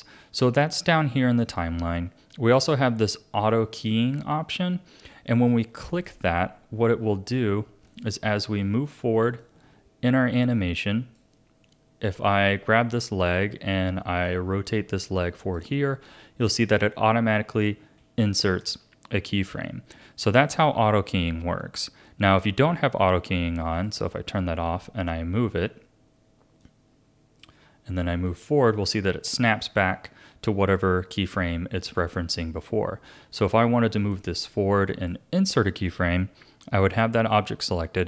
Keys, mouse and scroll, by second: 5.9 click, 7.9 click, 9.4-13.2 drag, 14.2 click, 18.6 ctrl+z, 23.7 click, 26.6 click, 28.3-31.3 drag, 34.1 click.